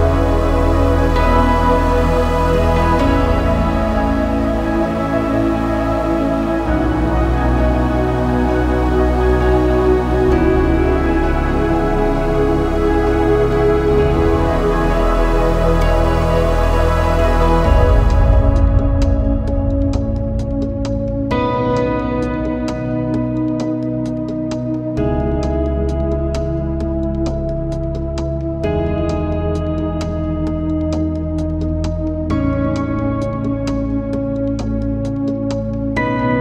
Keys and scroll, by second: 0.8 7, 2.8 space, 3.5 shift+t, 4.3 ., 8.9 space, 9.0 1, 12.0 ctrl+c, 13.5 ctrl+v, 14.5 BackSpace, 14.9 2, 23.1 3.